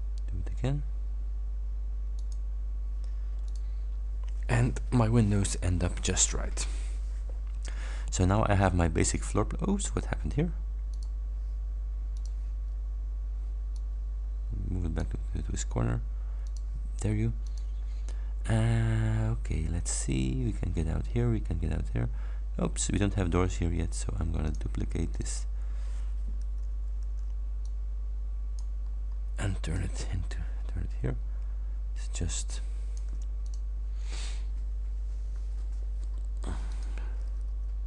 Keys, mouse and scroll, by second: 2.2 click, 3.5 click, 7.9-8.7 scroll down 2, 11.0 click, 12.2 click, 13.8-15.2 drag, 16.5 click, 17.5 click, 18.6 scroll down 1, 19.0 scroll up 1, 19.8 scroll down 1, 24.6 click, 25.2 click, 27.1 ctrl+d, 27.8 ctrl+click, 28.9-29.2 ctrl+scroll up 2, 29.8-33.2 ctrl+drag, 33.5 ctrl+click, 35.0-35.7 ctrl+scroll down 4, 36.0 ctrl+scroll up 2, 36.8 ctrl+click.